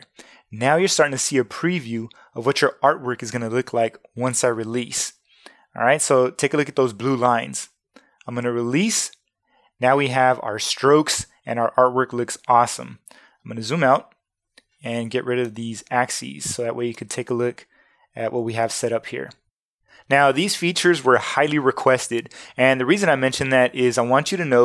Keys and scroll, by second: 13.6 super+0, 18.6 shift+super+a.